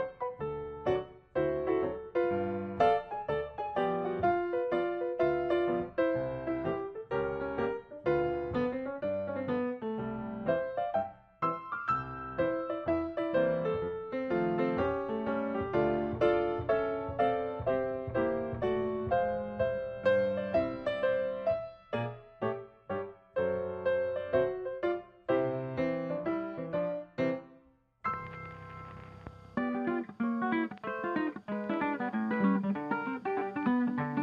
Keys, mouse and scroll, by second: 0.5 space, 1.5 ctrl+shift+click, 2.0 ctrl+shift+click, 2.4 ctrl+shift+click, 3.2 ctrl+d, 3.4 ctrl+click, 4.9 ctrl+s, 5.2 ctrl+shift+click, 6.5 ctrl+scroll up 3, 10.1 ctrl+click, 12.4 ctrl+click, 14.2 ctrl+shift+click, 15.7 ctrl+shift+click, 19.3 ctrl+d, 22.0 ctrl+shift+click, 22.5 ctrl+shift+click, 23.7 ctrl+shift+click, 23.8 ctrl+g, 25.1-26.5 ctrl+scroll down 4, 26.6 ctrl+scroll up 3, 27.5 ctrl+scroll up 1, 28.1 ctrl+shift+click, 28.6 ctrl+shift+click, 29.3 ctrl+shift+click, 29.7 ctrl+shift+click, 30.3 ctrl+shift+click, 31.0 ctrl+shift+click, 31.6 ctrl+shift+click, 32.3 scroll down 2, 32.9 ctrl+shift+click, 33.4-34.2 ctrl+scroll down 2.